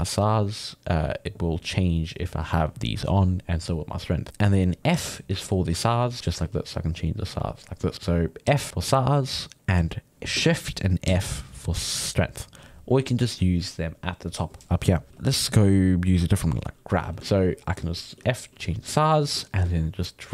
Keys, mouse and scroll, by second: 1.1-4.9 drag, 4.9 f, 5.9 click, 6.4 f, 7.0 click, 7.9 right click, 8.2 middle click, 8.5 f, 11.1 shift+f, 15.1 f, 16.4 click, 17.0 f, 17.4 ctrl+middle click, 18.1 f, 18.5 f, 18.9 f, 19.5 ctrl+shift+middle click, 20.1-20.3 drag.